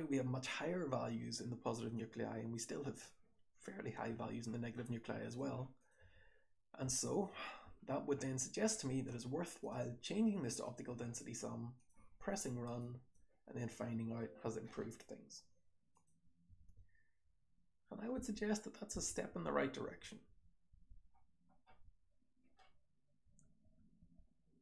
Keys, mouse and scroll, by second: 1.8-2.4 drag, 5.7 click, 5.9 h, 6.8 click, 7.0 click, 7.4-9.5 scroll down 1, 14.8-15.8 scroll up 1, 15.8 click, 15.8-16.5 scroll up 1, 16.5-17.1 scroll up 1, 16.5-21.7 typing, 17.3-18.1 scroll up 1, 18.1-18.9 scroll up 1, 18.9 scroll up 1, 21.1-21.7 scroll down 1, 22.6 scroll up 1, 22.9-24.5 typing, 23.5-24.6 scroll up 1.